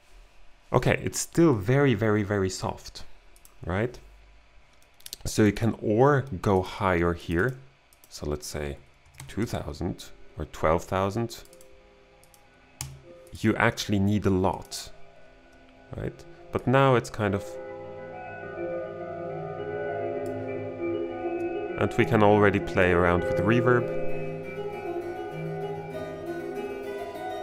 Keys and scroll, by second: 9.1 BackSpace, 9.2 2, 9.4 Return, 12.9 2.